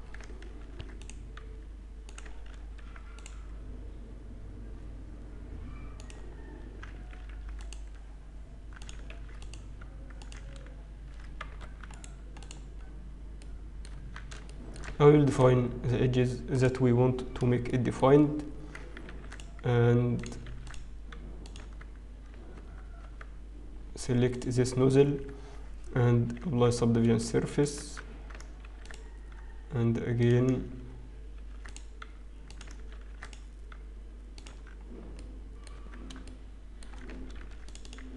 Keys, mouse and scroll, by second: 0.7 ctrl+r, 2.6 ctrl+r, 7.8 ctrl+r, 7.8-8.3 scroll up 1, 9.7 ctrl+r, 11.9 Tab, 11.9 right click, 12.7-14.6 scroll down 2, 15.4 Tab, 15.4 ctrl+r, 15.4 shift+middle click, 15.4-15.8 scroll down 2, 18.9-19.4 scroll up 2, 19.4 ctrl+r, 20.3 click, 20.5 ctrl+r, 21.6 Tab, 22.5 Tab, 23.8 Tab, 23.8-24.2 scroll down 4, 25.2 click, 26.2 ctrl+2, 27.2 shift+middle click, 28.4 Tab, 28.4-28.8 scroll up 1, 28.8 ctrl+r, 31.4 ctrl+r, 34.0 ctrl+r, 34.4 Tab, 34.8-35.3 scroll down 2, 35.3 middle click, 36.4 Tab, 36.4 shift+middle click, 36.4 scroll up 2, 37.3 ctrl+r.